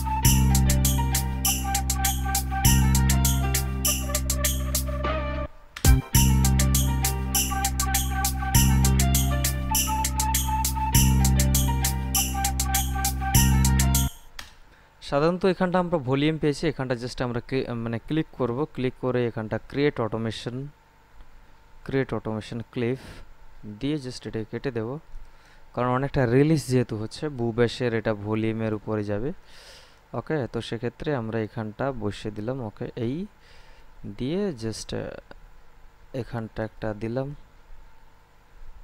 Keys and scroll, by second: 5.6 space, 14.3 space.